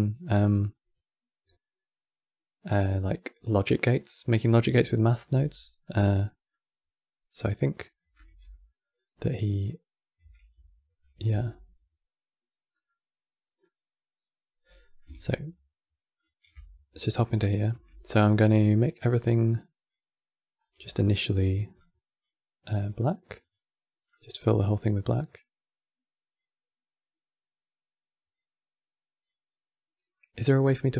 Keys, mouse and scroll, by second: 5.3-7.0 middle drag, 7.0 scroll down 1, 8.0 n, 9.9 n, 10.2 q, 11.0 Tab, 12.6 middle click, 13.5 scroll down 1, 14.5-15.9 middle drag, 15.9 ctrl+shift+click, 16.9 middle click, 17.4 n, 19.2-20.3 drag, 20.3-20.6 scroll down 3, 20.6-21.8 shift+middle drag, 21.8-26.8 drag, 28.4-30.9 drag.